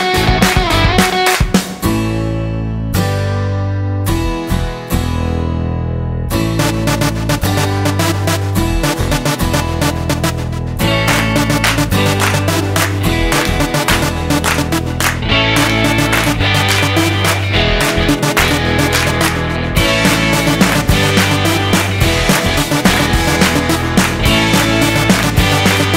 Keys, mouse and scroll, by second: 1.1 shift+a, 5.2 click, 6.7 click, 11.4 click, 14.4 click, 16.6 click, 19.7 middle click, 21.4-22.3 scroll down 8, 22.3 middle click, 22.9-24.0 scroll up 5, 24.4 click.